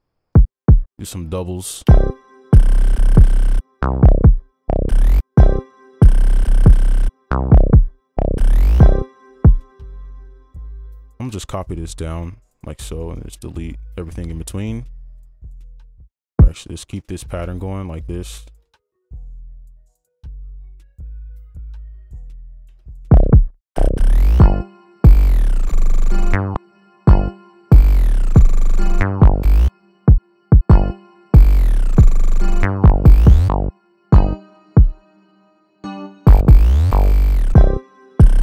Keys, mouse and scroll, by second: 0.7 double click, 1.9 space, 5.2 space, 10.2 space, 10.5 right click, 11.3 ctrl+a, 12.2 shift+click, 12.9 right click, 17.0 ctrl+click, 21.2 right click, 22.3 double click, 23.1 right click, 26.5 space, 26.7 space, 29.7 space, 30.5 double click, 36.0 double click.